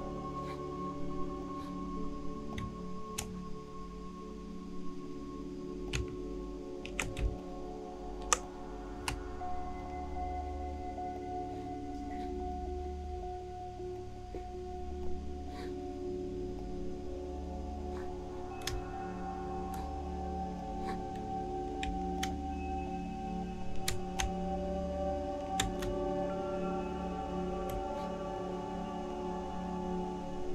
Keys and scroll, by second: 7.2 alt+shift+space.